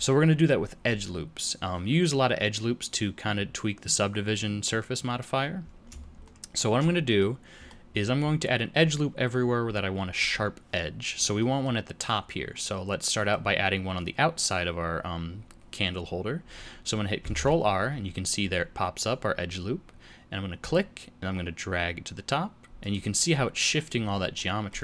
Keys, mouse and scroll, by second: 6.2 shift+middle click, 11.3 middle click, 12.5 middle click, 17.2 ctrl+r, 24.3 middle click.